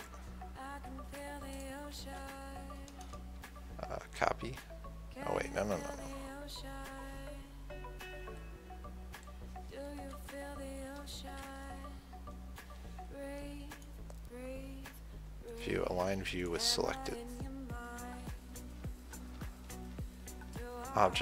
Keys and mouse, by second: 0.3-2.2 drag, 1.8-2.9 right drag, 2.3 ctrl+z, 4.3 shift+c, 10.3 KP_1, 11.6 KP_3, 17.9-21.2 middle drag.